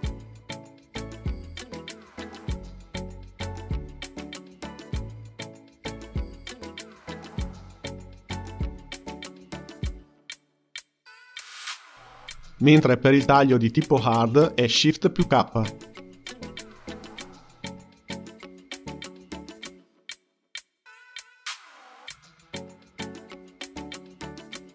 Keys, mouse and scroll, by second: 3.5 click, 4.1-8.3 drag, 8.3 ctrl+z, 8.6-10.9 ctrl+z, 15.1 shift+k, 17.6 x, 19.6 click, 20.1-24.7 drag.